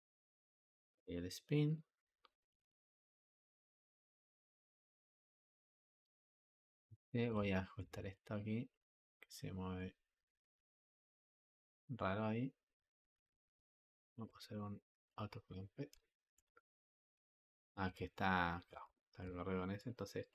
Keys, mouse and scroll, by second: 1.0 click, 1.6 click, 2.2 click, 8.2-15.1 drag, 15.1 v, 17.0 ctrl+z, 19.6-20.3 drag.